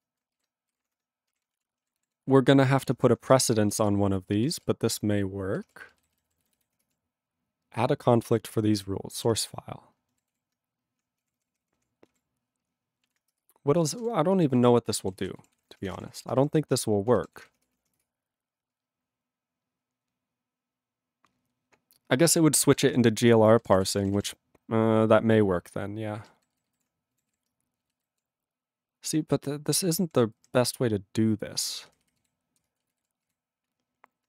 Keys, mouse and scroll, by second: 0.0-1.4 typing, 0.4 ctrl+b, 1.6 ctrl+e, 2.0 ctrl+s, 4.0 ctrl+s, 5.8 ctrl+s, 6.1 alt+b, 9.6 alt+b, 10.4 ctrl+s, 11.2 ctrl+p, 13.0 ctrl+e, 13.4 Return, 14.0-16.7 typing, 17.4 ctrl+s, 23.1 ctrl+s, 23.5 ctrl+n, 23.7 ctrl+e, 23.7 ctrl+n, 23.8 ctrl+e, 23.9 ctrl+n, 24.0 ctrl+e, 24.0 ctrl+n, 24.1 ctrl+e, 24.2 ctrl+n, 26.5 alt+b, 27.3 ctrl+s, 28.0 alt+b, 30.0 ctrl+p, 30.1 ctrl+e, 30.3 ctrl+n, 31.6 ctrl+space, 31.7 ctrl+f, 32.2 ctrl+g, 32.6 ctrl+space, 33.0 ctrl+alt+b, 33.2 ctrl+g.